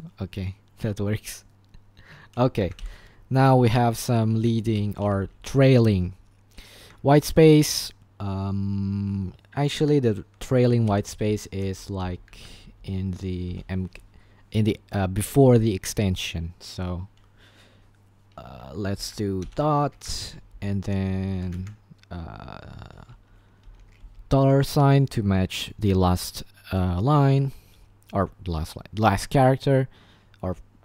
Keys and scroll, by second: 0.9-3.3 typing, 4.6-5.2 typing, 6.8-8.6 typing, 10.9-13.5 typing, 12.4 Escape, 18.9-21.2 typing, 20.0 Escape, 21.6 Escape, 22.9-24.9 typing.